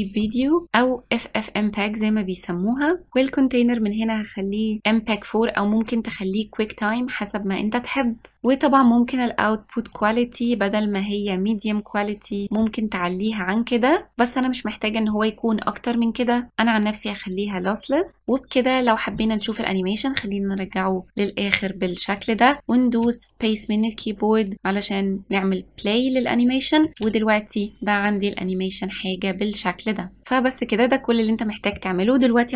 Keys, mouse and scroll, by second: 0.6-1.6 scroll down 2, 8.3-9.1 scroll down 2, 9.1-10.0 scroll down 2, 10.0-12.4 drag, 18.2 click, 21.6 click, 27.0 space, 30.2-32.5 middle drag.